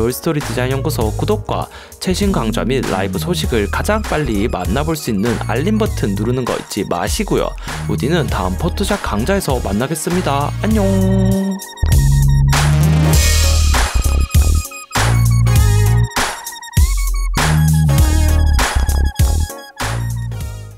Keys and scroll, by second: 0.1 super+j, 0.5 shift+Up, 0.9 shift+Right, 1.0 shift+Up, 1.1 shift+Right, 1.2 shift+Up, 1.4 shift+Right, 1.5 shift+Up, 1.6 shift+Right, 1.7 shift+Up, 2.0 shift+Up, 2.9 shift+Right, 3.3 shift+Up, 3.9 shift+Right, 4.5 shift+Up, 5.5 alt+super+g, 6.8 super+-, 7.4 alt+super+0.